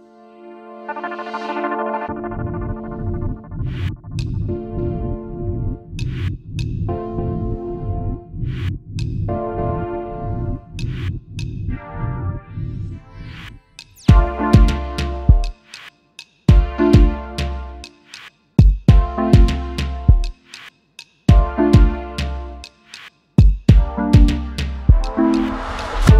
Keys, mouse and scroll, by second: 6.9 double click, 12.9 shift+click, 15.5 double click, 18.3-18.9 alt+scroll up 1, 19.1 space, 22.3 space.